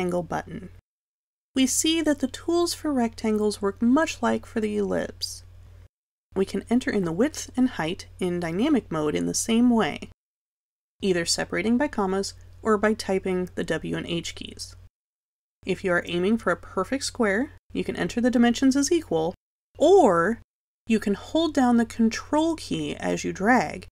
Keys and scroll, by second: 4.9 2, 11.5 h, 12.9 ,, 14.5 Return.